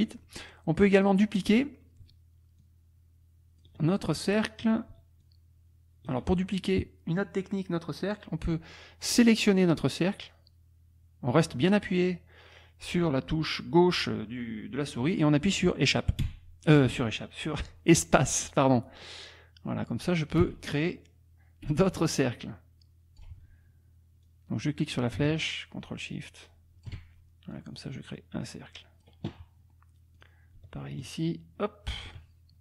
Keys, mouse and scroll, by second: 0.9 click, 2.6-3.8 ctrl+drag, 5.2 ctrl+click, 10.2-18.5 drag, 16.2 space, 18.5-19.3 scroll down 2, 19.3-20.4 scroll down 1, 20.4-21.0 scroll down 1, 20.4 space, 21.0-21.7 scroll down 1, 21.7 space, 24.2-27.1 drag, 27.5-29.2 drag, 30.2 click, 31.0-32.2 ctrl+shift+drag.